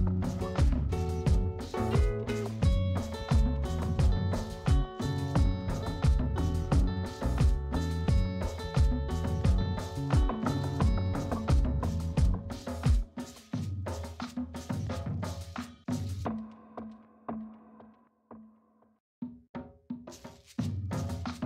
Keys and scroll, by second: 15.9 space.